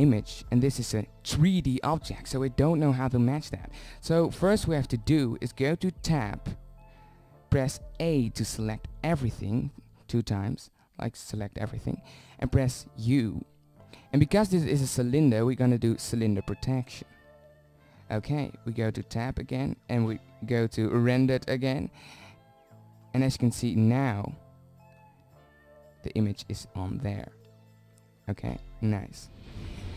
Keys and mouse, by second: 4.7 Tab, 6.7 a, 7.6 a, 8.7-10.5 middle drag, 11.8 u, 18.0 Tab, 29.7 click.